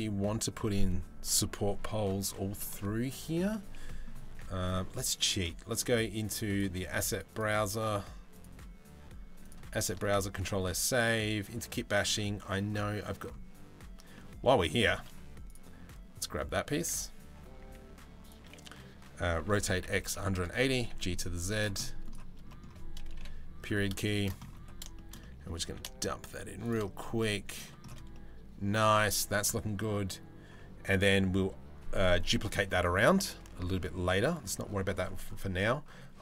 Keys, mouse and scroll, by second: 2.7 middle click, 3.4 middle click, 3.9 Tab, 4.2 middle click, 5.9 click, 7.0 click, 8.0-9.1 drag, 10.0 ctrl+s, 13.7 middle click, 17.2 s, 19.0 r, 20.3 g, 21.4 middle drag, 22.1 middle click, 22.8 KP_Decimal, 23.3 middle click, 23.7 shift+middle drag, 24.5 middle click, 24.8 middle click, 25.2 g, 26.8 middle click, 27.7 middle click.